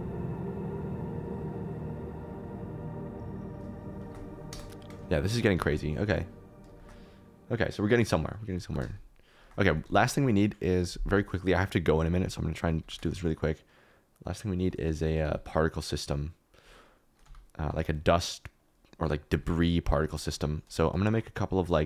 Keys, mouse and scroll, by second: 0.0-5.6 typing, 1.6 Escape, 2.0 Escape, 2.2 ctrl+z, 2.3 ctrl+z, 3.0 Escape, 3.1 Escape, 4.0 shift+click, 6.7 shift+middle click, 8.1 middle click, 8.6 g, 8.8 shift+z, 9.6 r, 9.8 z, 12.8 g, 13.0 shift+z, 15.0 r, 15.2 z, 17.2 g, 17.6 click, 17.6 r, 17.8 r, 19.3 r, 19.4 r, 20.1 shift+middle click, 21.0 shift+middle click.